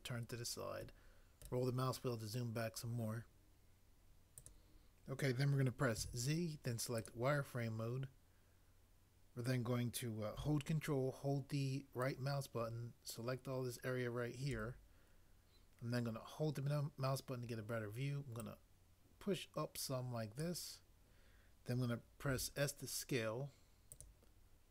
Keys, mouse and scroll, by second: 5.9 z, 22.2 s.